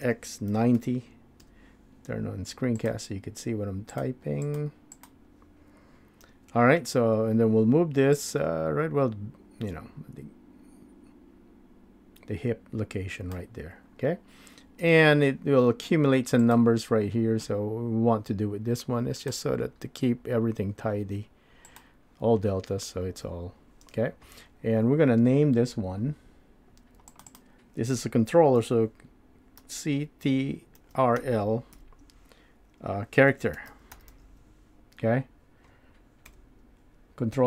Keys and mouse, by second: 6.2 n, 8.1-12.6 drag, 12.6 middle click, 14.8 n, 19.2-21.8 drag, 23.0 n, 27.4-37.4 drag.